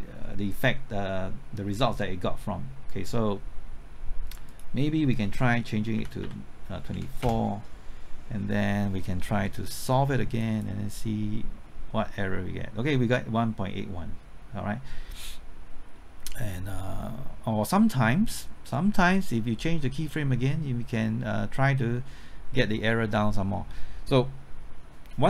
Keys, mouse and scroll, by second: 4.5 click, 6.0 KP_2, 6.2 KP_4, 7.2 KP_Enter, 10.4 click.